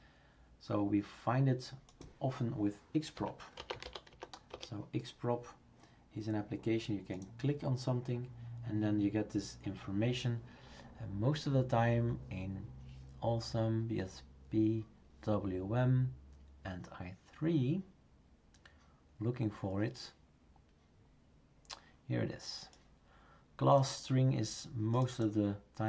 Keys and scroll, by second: 3.1-4.6 typing.